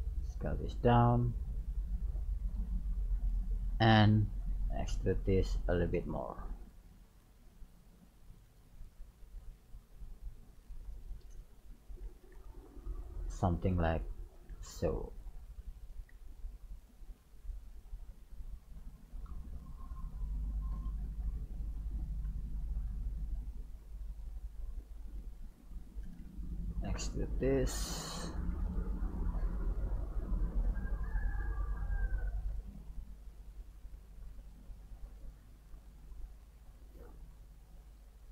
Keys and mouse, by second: 1.6 middle click, 2.0 click, 2.7 KP_3, 4.0 e, 6.3 right click, 6.9 e, 8.8 right click, 9.1 e, 11.0 right click, 12.0 ctrl+a, 13.7-15.5 right drag, 14.6 ctrl+a, 16.2 g, 17.6 right click, 17.8 g, 20.1 right click, 20.7 KP_3, 22.4 g, 26.5 e, 29.5 right click, 30.8 g, 32.5 right click, 32.7 g, 35.2-38.3 right drag, 35.5 g, 36.6 g.